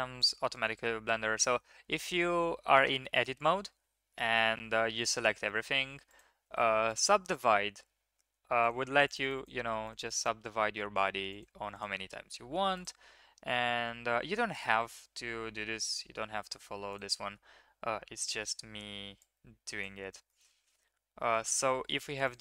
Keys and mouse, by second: 6.2-6.9 drag, 6.2 1, 8.6 click, 8.7 click, 9.0 click, 9.2 click, 9.3 click, 9.8 click, 10.0 click, 10.1 click, 11.7 click, 12.7 click, 13.7 g, 18.1-18.4 middle drag, 19.1-20.4 drag, 20.6 Tab, 21.3 Tab, 22.2-22.4 drag.